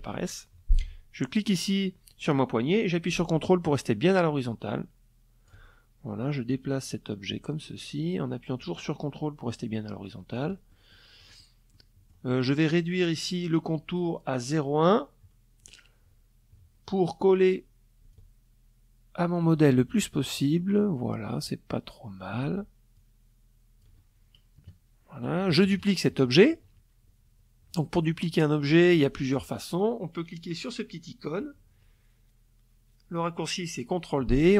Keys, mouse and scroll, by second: 5.5-9.1 ctrl+drag, 9.3 ctrl+middle click, 9.9 ctrl+middle click, 10.3 ctrl+middle click, 12.4 click, 13.4 click, 15.5 click, 16.7-18.1 ctrl+drag, 21.5-22.6 ctrl+drag, 23.1 KP_Add, 23.9 KP_Subtract, 33.7 click.